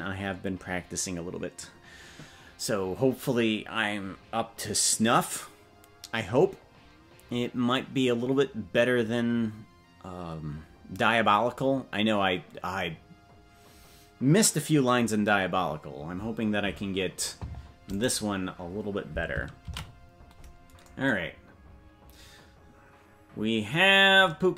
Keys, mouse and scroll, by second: 23.5 ctrl+s.